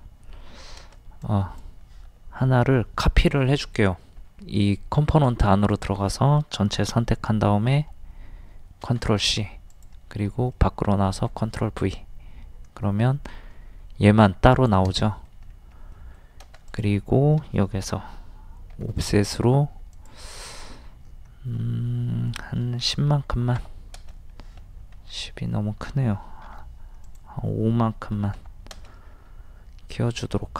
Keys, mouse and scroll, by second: 1.2 space, 1.3 click, 8.8 ctrl+c, 9.7 click, 10.3 middle click, 11.1 ctrl+v, 14.5 click, 15.0 middle click, 15.2 scroll up 1, 15.9 middle click, 16.7 click, 18.7 o, 19.9 click, 23.1 KP_1, 23.3 KP_0, 24.9 ctrl+z, 27.0 click, 28.2 KP_5, 29.2 scroll up 1, 30.4 middle click.